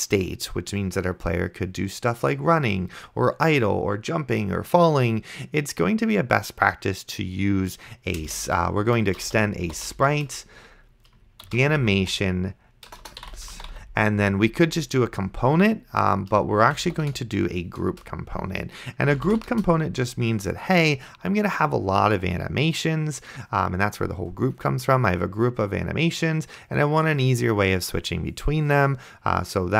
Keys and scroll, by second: 9.0-14.5 typing, 16.6-17.8 typing, 17.9 Return, 19.0 space, 19.6 shift+[, 19.6 Return.